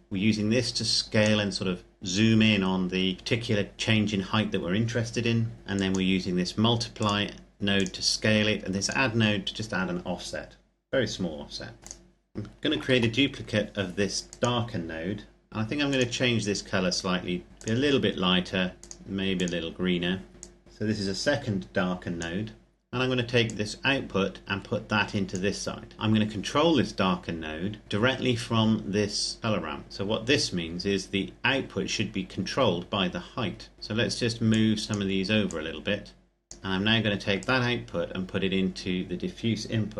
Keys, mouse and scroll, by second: 5.5 click, 11.8 click, 12.7 shift+d, 13.9 click, 27.8 click, 33.2-34.3 scroll down 1, 34.3 click, 36.6-37.1 scroll up 1, 37.1 click.